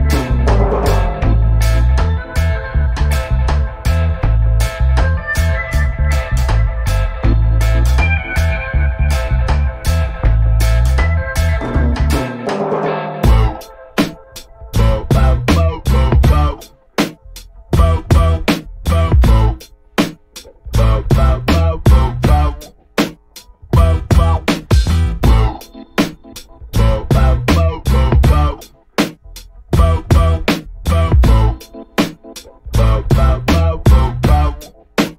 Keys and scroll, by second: 13.6 g, 15.0 KP_1, 15.8 KP_Subtract, 16.9 Return, 20.5 i, 24.7-25.9 typing, 26.4 Return, 28.6 shift+i, 29.7 shift+Left.